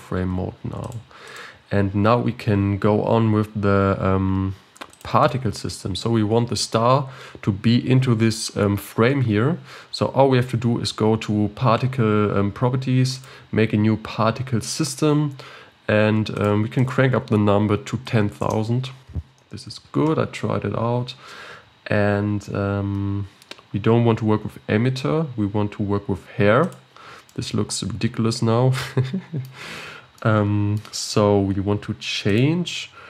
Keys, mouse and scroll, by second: 0.8-1.9 drag, 4.9 click, 13.1-16.1 drag, 16.3-20.3 drag, 26.6 click, 27.2-29.9 middle drag, 29.9 scroll down 1, 30.2-32.3 middle drag, 32.3-33.0 drag.